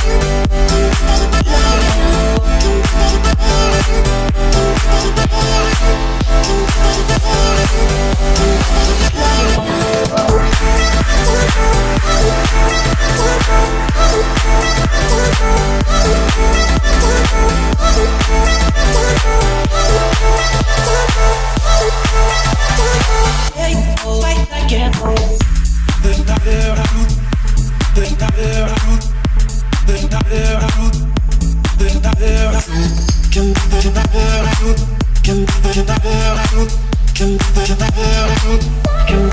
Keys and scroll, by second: 11.4 Escape, 18.7 Escape, 19.7 o, 31.9 Escape, 33.8 Escape, 37.7 1.